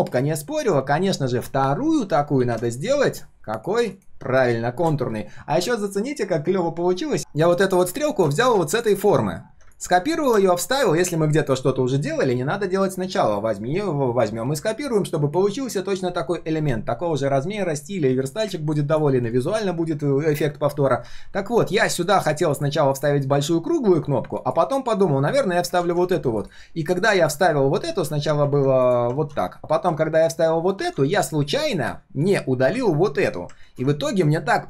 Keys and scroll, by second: 25.8 ctrl+z, 27.9 ctrl+z, 29.1 ctrl+x, 30.8 ctrl+v, 33.6 ctrl+z.